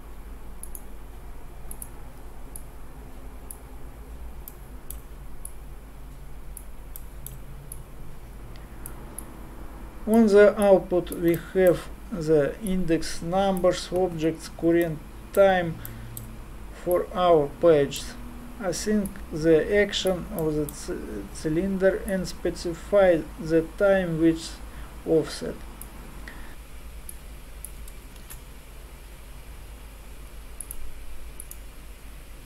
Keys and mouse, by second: 1.8-5.5 drag, 5.5-9.2 middle drag, 9.2-10.7 drag, 12.7-14.2 middle drag, 21.5 middle click, 22.1-24.0 drag, 27.1-29.4 drag, 28.2 shift+a, 31.5-32.4 drag.